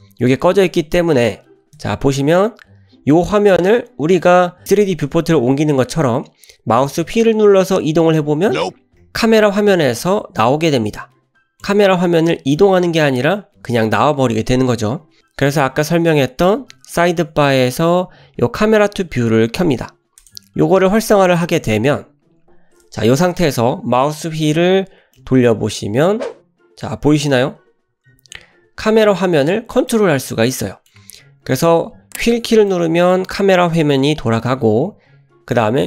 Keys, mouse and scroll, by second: 1.8 n, 8.5-9.6 middle drag, 9.7-10.3 scroll down 5, 10.5-11.7 middle drag, 11.9-12.6 scroll up 4, 12.6 middle click, 16.6 n, 20.2 click, 24.4 KP_0, 25.2-26.2 middle drag, 27.3-27.6 scroll down 1, 27.9-29.1 scroll down 7, 29.0-29.3 scroll up 3, 29.9 middle click, 29.9 scroll up 1, 32.7-35.6 middle drag.